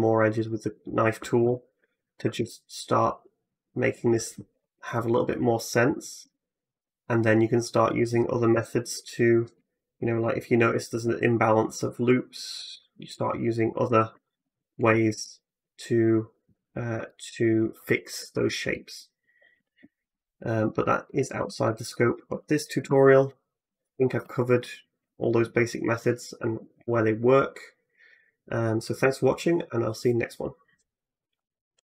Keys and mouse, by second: 2.2 k, 6.0 k, 10.0 ctrl+r, 12.5 1, 12.5 `, 12.9 middle click, 12.9 right click, 13.4 shift+middle click, 13.4 shift+right click, 14.2 j, 14.7 a, 14.9 a, 19.4 Tab, 19.8 x, 22.7 shift+s, 25.8-31.9 drag.